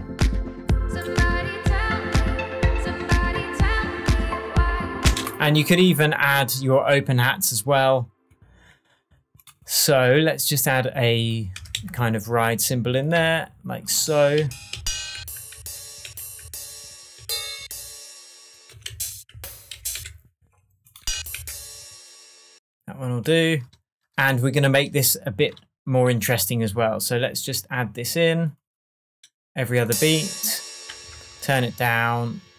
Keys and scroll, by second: 5.0 space, 11.5 Down, 11.7 Left, 13.1 Right, 14.3 Down, 16.0 Up, 16.4 Down, 17.5 Up, 18.7 Right, 18.8 Down, 19.7 Up, 19.9 Left, 21.1 Down, 31.1 shift+Tab.